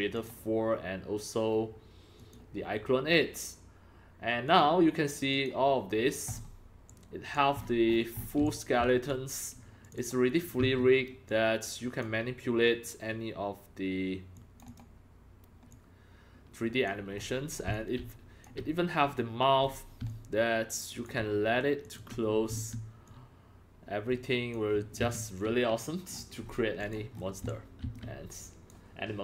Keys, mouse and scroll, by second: 0.1 click, 2.2 click, 4.4 click, 5.3 click, 6.3-6.6 scroll up 4, 6.9 click, 7.6-8.4 scroll up 18, 8.4-9.5 typing, 8.4 click, 9.8 click, 10.0 click, 10.6 e, 11.3 click, 12.1-13.6 drag, 14.3 click, 14.7 click, 15.7-16.9 drag, 17.1-17.5 scroll up 7, 17.7-19.0 drag, 18.0 c, 19.0 c, 19.6-19.9 scroll up 5, 20.0-21.0 c, 20.1 click, 21.1 click, 21.4 c, 21.8 click, 22.0 click, 22.5 e, 23.0-24.5 drag, 25.1 ctrl+z, 26.1-26.7 scroll down 11, 26.8 click, 27.1-27.5 scroll down 5, 27.5 x, 27.5-29.2 drag, 27.9 c.